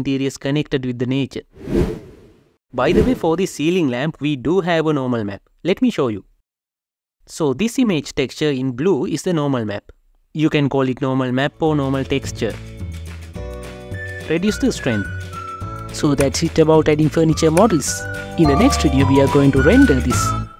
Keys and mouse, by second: 1.0 shift+z, 3.0 g, 4.4 KP_Decimal, 6.1 click, 11.3-13.2 drag, 13.8 click, 14.4-15.4 drag.